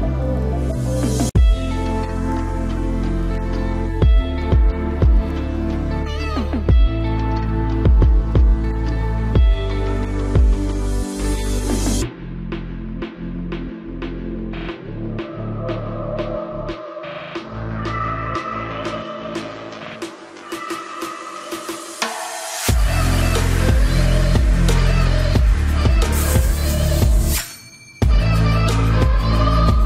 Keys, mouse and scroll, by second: 0.5 ctrl+s, 3.0 g, 5.0 s, 6.4 KP_Decimal, 7.2 Tab, 7.8 s, 8.9-12.0 drag, 11.0 s, 11.7 right click, 13.4 e, 16.6 a, 17.0 a, 17.3 s, 18.7 s, 19.5 s, 23.0 z, 24.0 KP_7, 24.4 z, 24.9-26.7 middle drag, 25.6 s, 26.7 s, 27.9 s.